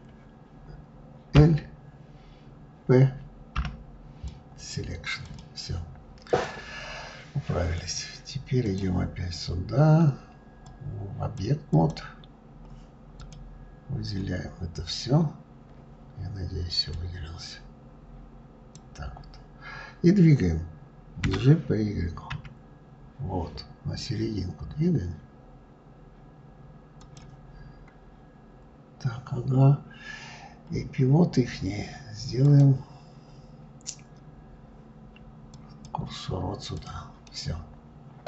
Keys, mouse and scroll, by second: 1.0 l, 4.9 click, 5.9 click, 7.4-11.5 drag, 12.8 click, 16.6 click, 27.2-30.3 scroll up 1, 32.1-35.1 drag, 36.4 click, 36.9-38.2 middle drag.